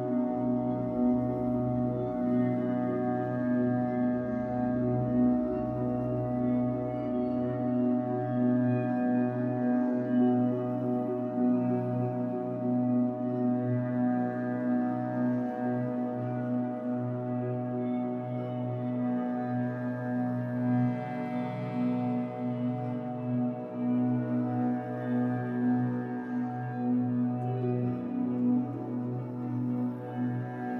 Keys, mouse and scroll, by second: 1.4-2.7 middle drag, 2.7 click, 3.0 middle click, 3.6 shift+click, 4.5 scroll down 1, 4.7-11.2 middle drag, 5.2 z, 7.0 scroll down 1, 8.9-9.5 shift+scroll up 2, 11.2 click, 11.6 shift+middle click, 11.8 scroll up 1, 12.4 click, 12.6 middle click, 13.2-14.3 drag, 14.3 middle click, 14.7 click, 16.1 click, 17.7 middle click, 18.5 click, 18.8-22.4 middle drag, 22.4 click, 23.3 click, 25.3-26.9 middle drag, 25.7 scroll down 2, 26.4 Tab, 26.9 right click, 27.6 scroll down 2, 27.8-30.7 middle drag, 28.1-28.6 scroll down 2, 29.6-30.4 scroll up 3.